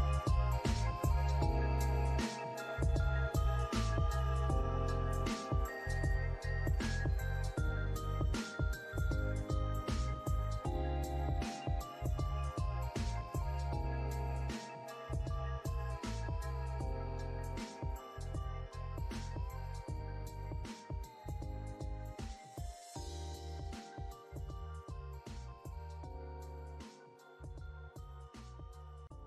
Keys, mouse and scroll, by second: 0.1 alt+scroll down 1, 0.7 alt+middle click, 1.0 alt+click, 1.9 alt+scroll down 1, 2.6 alt+middle click, 2.9 alt+click, 3.9 alt+middle click, 4.5 scroll up 3, 5.0 alt+click, 6.1 alt+middle click, 11.1 scroll up 2, 11.8 alt+middle click, 13.4 alt+click, 14.4 alt+click, 17.4 alt+click, 20.4 alt+click, 20.6 alt+double click, 21.1 alt+click, 22.4 alt+middle click, 22.8 alt+click, 23.4 alt+scroll up 1, 24.2 alt+click, 26.7 alt+click.